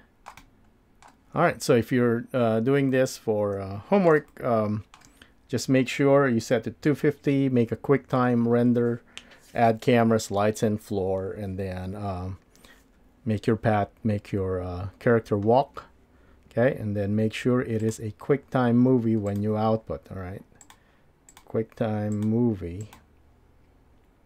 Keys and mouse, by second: 0.4-1.0 shift+middle drag, 2.9-4.1 middle drag, 4.3-5.0 shift+middle drag, 20.6-21.4 drag, 22.1-23.0 drag.